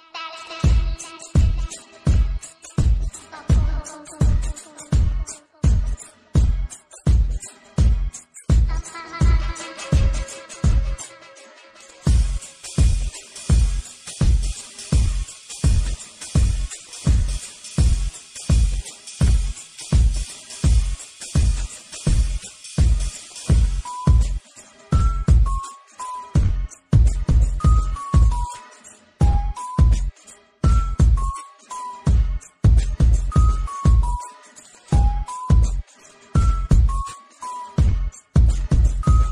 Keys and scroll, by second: 4.3 ctrl+z, 6.0 ctrl+z, 6.6 ctrl+z, 7.2 z, 8.0 s, 16.4 ctrl+z, 18.4 ctrl+z, 23.3 space, 28.5 alt+space, 37.6 ctrl+z.